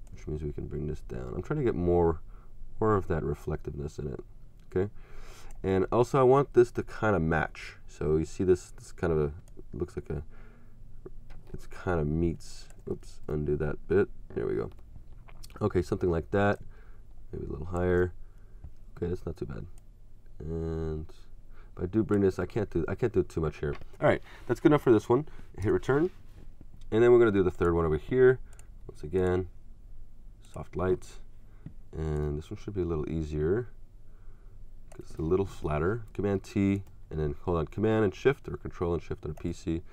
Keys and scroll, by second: 13.0 ctrl+super+z, 22.5 super+z, 25.6 Return, 35.6 shift+super+t, 36.1 super+t.